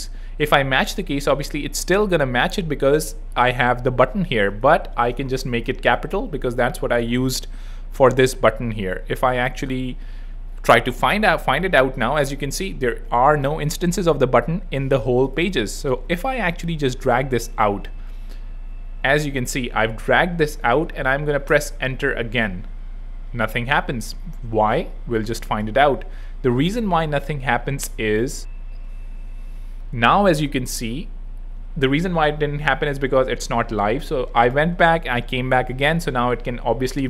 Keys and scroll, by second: 4.9 super+Left, 5.2 shift+super+Right, 5.4 shift+b, 21.5 Return.